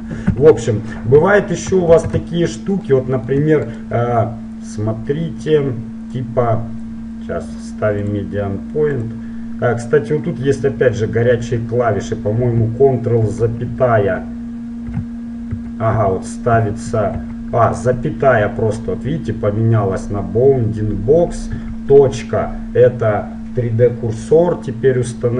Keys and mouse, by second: 0.1 ctrl+z, 0.3 ctrl+z, 1.9 shift+c, 2.3-3.8 middle drag, 3.8-5.8 right drag, 6.2-8.2 drag, 8.4-9.9 drag, 13.2 ctrl+,, 14.9 ,, 15.5 ctrl+,, 16.0 ctrl+,, 16.6 ctrl+,, 17.2 ,, 21.6 ..